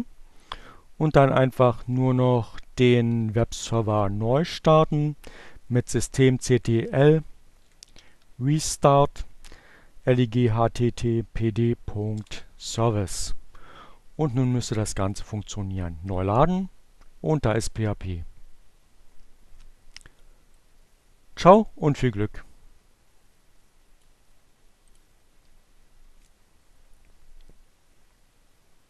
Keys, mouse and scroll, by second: 3.5 BackSpace, 5.0 BackSpace, 6.5 r, 6.9 e, 9.6 Return, 13.2 click, 13.5 right click, 14.5 click, 18.8-23.1 drag, 23.5 click.